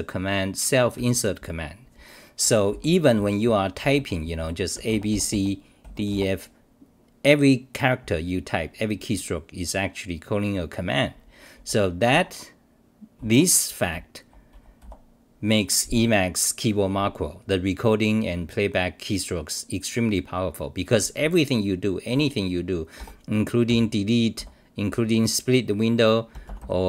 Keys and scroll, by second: 1.0 r, 2.7 d, 3.2 w, 4.4 u, 12.1 Home, 13.2 w, 13.9 r, 14.8 1, 22.1 2, 23.0 ctrl+g, 23.7 i, 24.3 [.